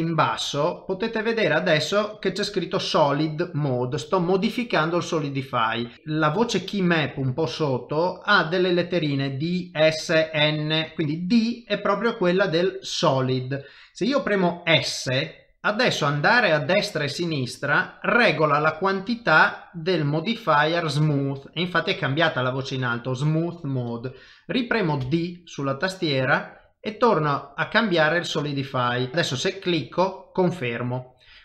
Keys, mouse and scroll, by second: 30.3 middle click.